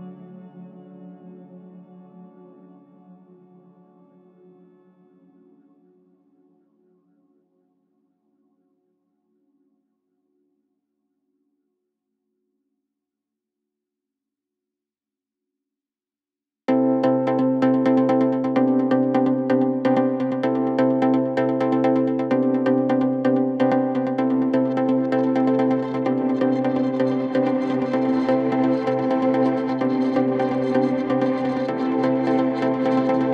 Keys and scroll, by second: 1.4 Delete, 5.2 ], 11.8 ., 14.7 ctrl+z, 15.5 ctrl+z, 15.6 Escape, 15.7 ctrl+z, 16.6 Escape, 20.4 ctrl+z, 25.6 ctrl+z, 25.7 ,, 26.0 Escape.